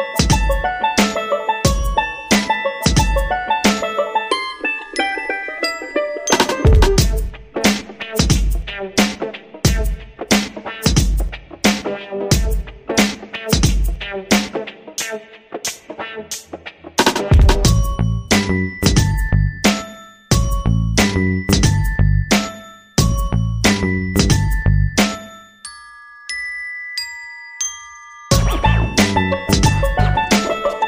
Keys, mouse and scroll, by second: 3.9 click, 6.6 ctrl+middle click, 7.5 shift+middle click, 9.2 c, 12.5 right click, 14.8 click, 18.8 click, 22.7 click, 23.9 click, 27.9 middle click.